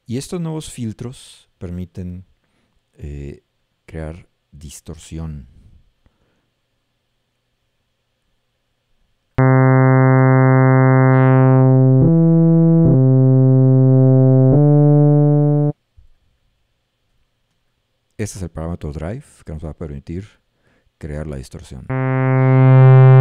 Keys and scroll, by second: 9.4 a, 12.0 d, 14.6 s, 21.9 a.